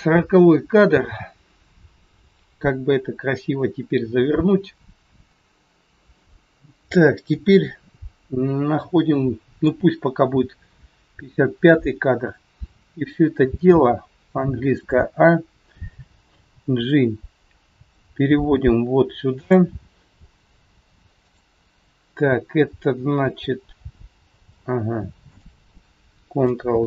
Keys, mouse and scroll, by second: 7.3 click, 21.2 click, 23.7 g, 26.7 ctrl+z.